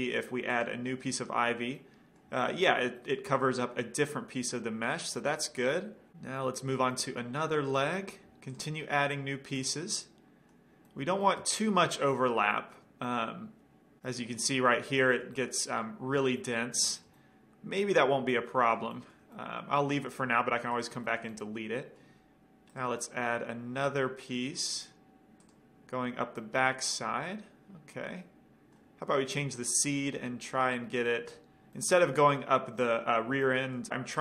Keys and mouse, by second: 0.7 click, 1.9 middle drag, 8.2-8.7 drag, 9.2-10.6 middle drag, 16.0-20.9 middle drag, 20.9-21.7 right drag, 21.7-22.7 middle drag, 22.9-24.4 middle drag, 25.6-27.2 drag, 26.6-28.4 middle drag, 29.9-31.5 drag, 31.9-33.9 middle drag.